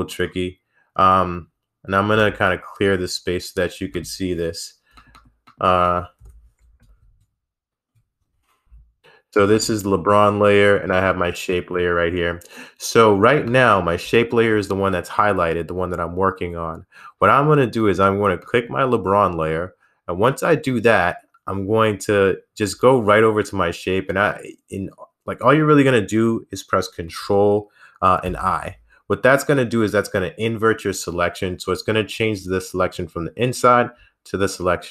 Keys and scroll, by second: 6.1-9.4 typing.